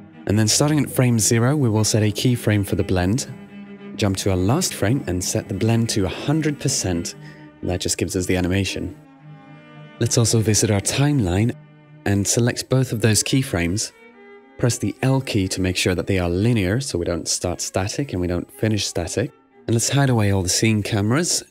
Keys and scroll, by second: 9.1-10.9 typing, 11.1 Return, 15.4 l, 16.6 super+w.